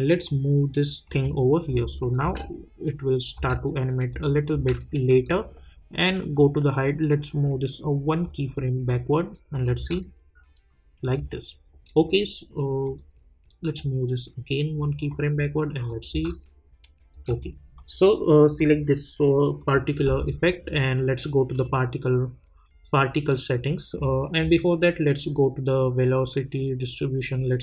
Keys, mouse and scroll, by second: 0.2-1.7 drag, 2.2 space, 6.2-9.5 drag, 9.8 space, 12.8-15.1 drag, 16.1 space, 17.7 click, 20.6-21.5 scroll down 1, 21.5 click, 23.5-24.1 scroll up 1.